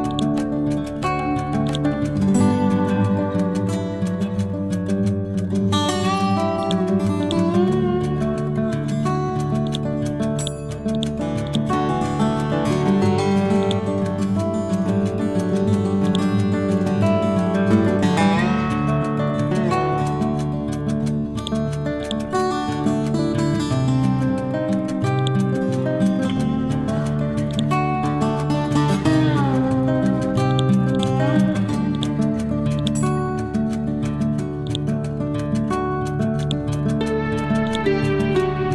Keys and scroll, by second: 29.1 ctrl+z.